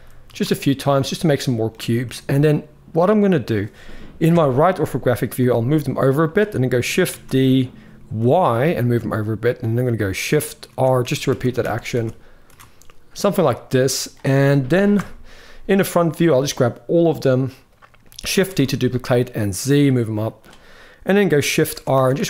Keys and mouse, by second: 0.6-1.4 drag, 1.8 g, 4.0 KP_3, 5.1 g, 6.9 shift+d, 10.4-12.2 typing, 13.1-13.8 drag, 14.7 KP_1, 16.8-17.2 drag, 18.1 shift+d, 21.5-22.2 typing.